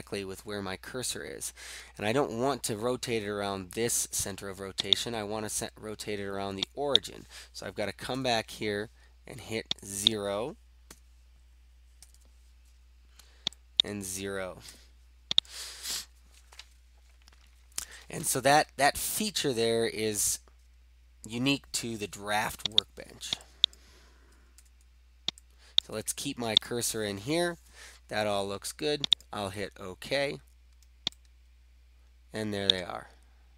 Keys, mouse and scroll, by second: 5.1 click, 7.0 click, 8.2 typing, 10.2 click, 10.9-12.6 typing, 13.9 click, 14.6 0, 15.3 click, 22.9 click, 23.8 click, 24.6 0, 25.9 click, 25.9 0, 26.6 click, 29.2 click, 32.8 right click, 32.8 middle click, 33.1 scroll, 33.2-33.5 scroll down 3.